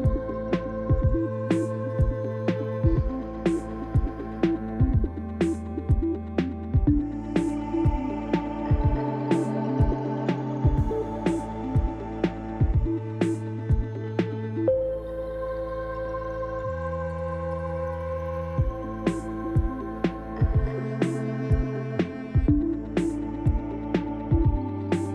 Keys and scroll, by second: 3.2 ctrl+b, 5.1 Tab, 9.1 Tab, 19.5 ctrl+-, 21.7 s.